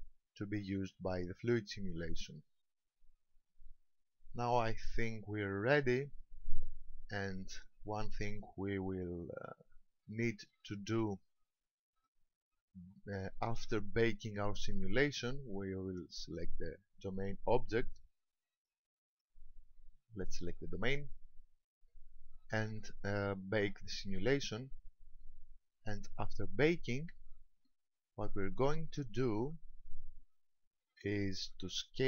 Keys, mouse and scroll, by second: 4.6-5.3 scroll up 1, 11.8 middle click, 14.0-15.6 scroll down 1, 16.2 right click, 18.6 right click, 19.2 right click, 21.0 click, 27.2-29.1 scroll up 2.